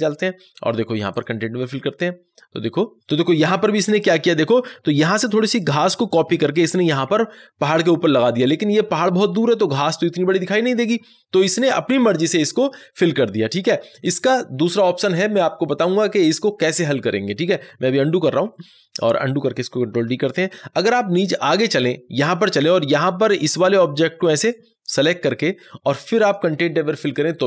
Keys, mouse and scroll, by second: 3.4 ctrl+z, 3.8 ctrl+d, 17.6 ctrl+d, 17.8 ctrl+z, 20.3 ctrl+d, 21.3 click, 24.2-27.4 drag.